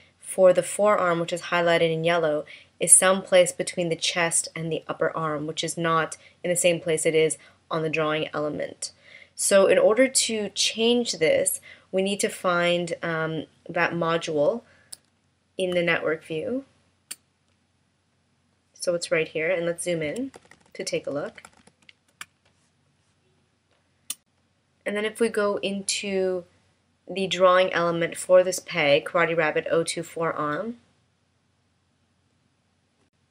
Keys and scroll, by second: 15.8 space, 20.3 super+=, 22.2 space.